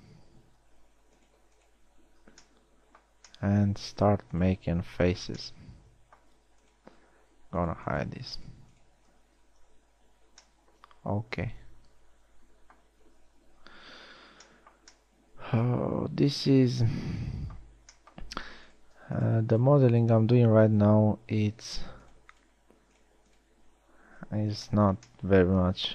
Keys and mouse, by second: 0.2 shift+j, 5.8 f, 10.2 h, 22.2 f, 24.9 f.